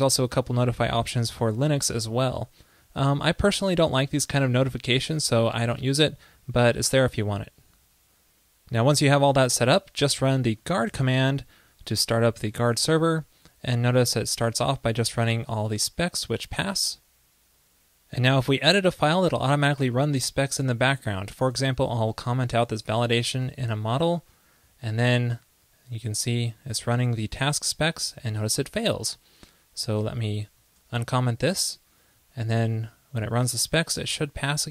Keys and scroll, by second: 21.7 super+/, 23.6 super+s, 30.9 super+/, 31.0 super+s.